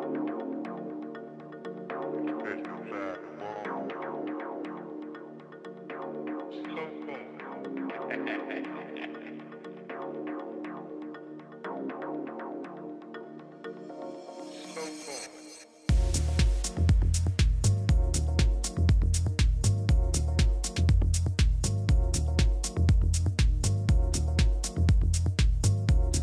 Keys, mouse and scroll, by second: 1.8-3.7 drag, 2.5-7.2 middle drag, 2.5-3.8 right drag, 7.4-9.0 right drag, 9.1 Delete, 10.9 a, 11.2 a, 12.4-14.4 middle drag, 13.9 KP_7, 15.2-20.2 middle drag, 16.8 a, 17.2 a, 19.0 a, 19.4 a, 22.7 KP_3, 23.9-25.4 middle drag, 25.4 right click, 26.1 click.